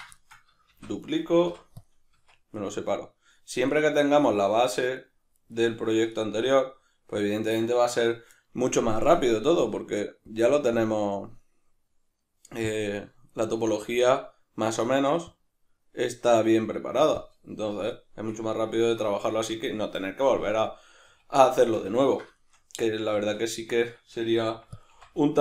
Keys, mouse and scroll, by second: 0.7 shift+d, 1.1 right click, 1.5 p, 2.1 Tab, 2.5 right click, 2.7 right click, 3.7 right click, 3.9 right click, 4.2 right click, 4.4 right click, 4.7 right click, 4.9 right click, 5.3 right click, 5.5 right click, 9.2-12.8 drag, 14.0-17.2 drag, 18.6-24.8 ctrl+middle drag, 20.4 Tab, 21.1 a, 23.2 Tab, 24.4 f, 24.8 click.